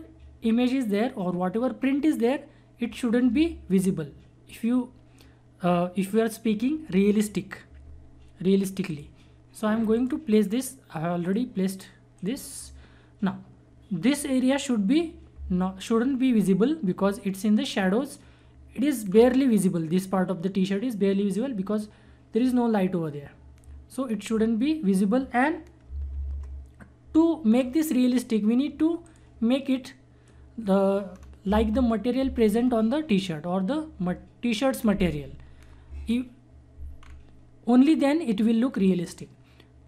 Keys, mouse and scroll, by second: 8.9 click, 19.0 scroll down 1, 25.8 ctrl+Num_Lock, 25.8 scroll down 1, 26.1 ctrl+=, 27.4 scroll down 1, 29.0-31.1 drag, 31.1 scroll up 1, 37.0 scroll down 1.